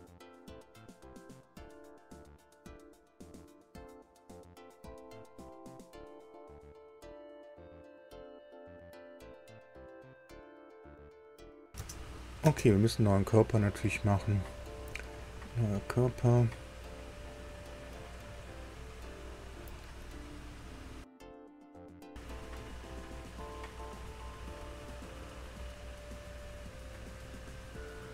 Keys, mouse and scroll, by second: 2.7 click, 6.1 click, 6.9 space, 7.5 space, 9.8 click, 10.5 space, 11.7 space, 12.4 space, 14.7 click, 16.4 click, 23.6 click, 26.3 click, 26.7 scroll down 2, 27.7-28.1 drag.